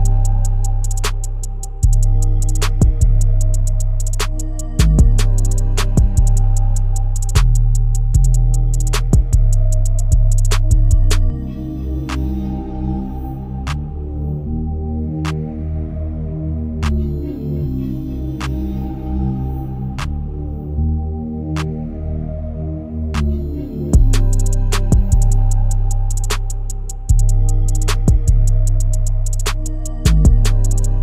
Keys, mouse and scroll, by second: 0.0 KP_0, 3.5-4.0 shift+middle drag, 4.0-4.3 scroll up 1, 4.3-4.6 shift+middle drag, 4.6-5.2 scroll up 3, 5.2-5.6 scroll down 1, 5.6 shift+middle click, 6.1-7.3 scroll down 1, 7.3 middle click, 8.2 Tab, 8.5-9.1 scroll down 1, 9.1 click, 10.0 click, 11.1 2, 11.5 click, 11.8-13.0 scroll down 2, 13.0 g, 14.1 Tab, 14.6 KP_0, 15.5-15.9 scroll up 2, 15.9-16.4 shift+middle drag, 16.4 click, 17.2-18.5 shift+middle drag, 18.5-20.6 drag, 21.2-21.6 shift+middle drag, 21.6 click, 22.5 click, 24.0-24.6 shift+middle drag, 24.6-25.1 scroll up 2, 25.1-27.6 shift+middle drag, 27.6 click, 28.3 KP_1, 29.8 KP_Enter.